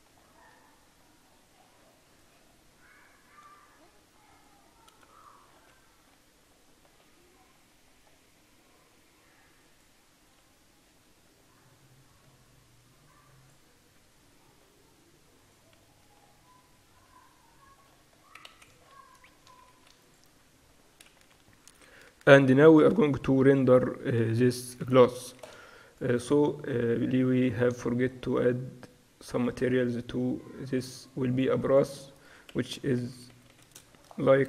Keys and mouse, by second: 0.6 Tab, 2.1-4.3 drag, 2.4 Tab, 3.5 a, 4.4-7.1 right drag, 4.9 a, 5.8 Tab, 7.1 Tab, 8.1-9.7 middle drag, 9.7-14.2 drag, 14.6 x, 16.1 Tab, 17.1 Tab, 18.5 ctrl+s, 18.9 middle click, 19.8 ctrl+s, 21.2-23.2 typing, 24.8 KP_4, 25.6 ctrl+s, 28.7 middle click, 28.9 middle click, 29.4-33.6 drag, 30.8-33.6 right drag, 33.6 s.